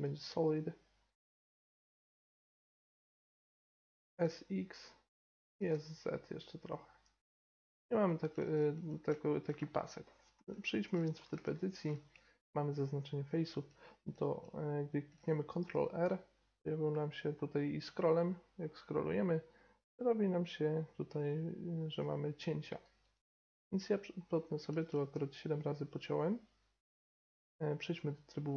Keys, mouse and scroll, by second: 0.0-2.9 drag, 2.9-3.4 middle drag, 4.0 s, 5.4 s, 7.7-8.1 scroll up 1, 8.1 scroll down 1, 10.3 Tab, 15.6 ctrl+r, 24.2-26.3 middle drag, 25.1 z, 28.1 middle click.